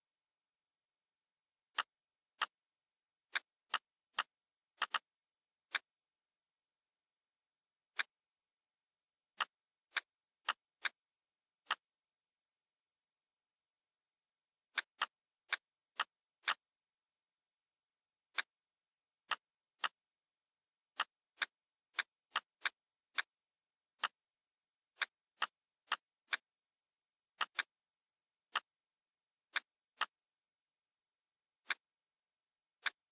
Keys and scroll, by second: 1.0 ctrl+f, 6.5 0, 13.6 ctrl+g.